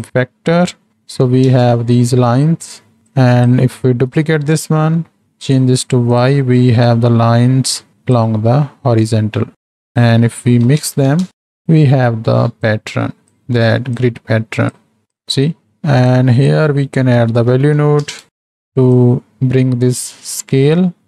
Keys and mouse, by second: 0.9 click, 3.2 shift+click, 4.2 shift+d, 5.5-6.2 drag, 7.0-8.3 drag, 9.8-11.6 drag, 12.7-13.5 drag, 14.1-14.9 drag, 15.0 click, 16.1-18.5 drag, 18.9-20.3 drag, 20.7 click.